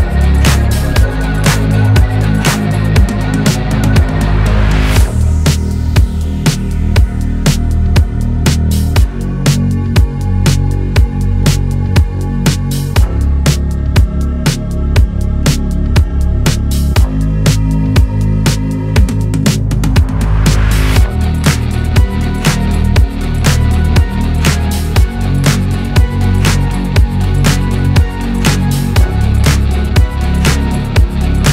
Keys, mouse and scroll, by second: 0.7 r, 1.8 click, 2.1 g, 2.8 click, 2.9 g, 5.4 Tab, 6.0-7.5 drag, 7.5 Tab, 7.7 Tab, 8.1 click, 8.2 Tab, 8.6 click, 8.9 r, 9.9 s, 11.0-14.4 typing, 12.6 click, 17.0 Tab, 17.3 click, 17.9 click, 18.4 middle click, 19.3 KP_3, 19.9 click, 20.1 Tab, 20.6 g, 22.3 click, 22.6 g, 24.3 r, 25.0 click, 25.4 r, 26.0 click, 26.2 Tab, 26.9 click, 27.7 s, 28.9 Tab, 29.1 Tab, 29.2 click, 29.4 scroll down 3, 29.5 middle click, 30.4 scroll up 1, 30.9 click, 31.4 ctrl+z.